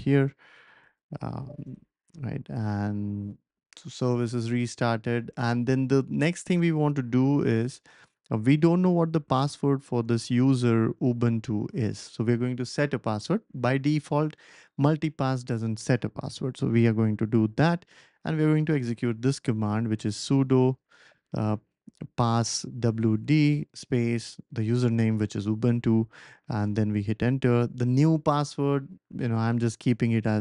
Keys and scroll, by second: 0.9 BackSpace, 1.1 BackSpace, 1.2 BackSpace, 1.3 BackSpace, 1.6 Return, 7.5 super+c, 17.5 ctrl+shift+v, 18.7 Left, 19.2 Left, 19.3 Left, 19.4 Left, 19.5 Left, 19.6 Left, 20.6 BackSpace, 20.7 BackSpace, 20.9 BackSpace, 21.0 BackSpace, 21.7 Right, 22.2 Right, 22.2 Right, 22.4 Right, 22.5 Right, 26.6 Return, 30.2 p.